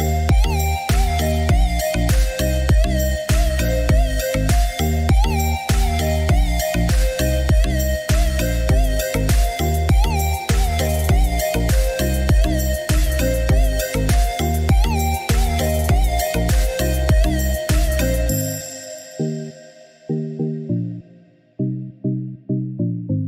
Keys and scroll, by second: 20.1 ctrl+8.